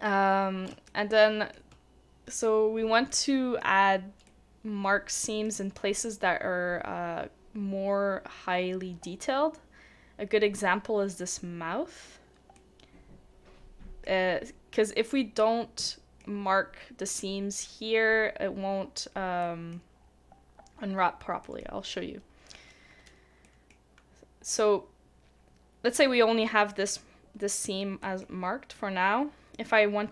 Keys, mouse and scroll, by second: 0.1-0.7 scroll up 1, 0.9 shift+middle click, 2.2 scroll down 1, 2.2-2.7 scroll up 1, 3.1 middle click, 3.6-4.3 scroll up 1, 4.3 middle click, 12.5 middle click, 18.8 middle click, 19.4 scroll down 1, 19.4 middle click, 20.0 scroll up 1, 21.0-21.4 scroll down 1, 21.4 middle click, 21.8 scroll down 1, 21.9-23.4 scroll up 1, 23.4 middle click.